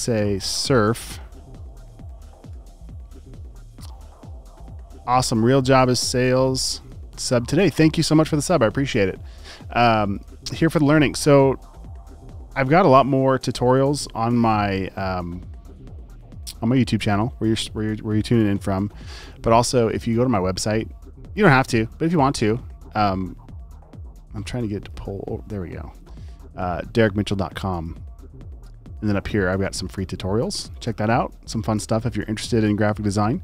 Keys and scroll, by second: 0.0-1.0 typing, 2.1 typing, 13.6 t, 18.4 super+n.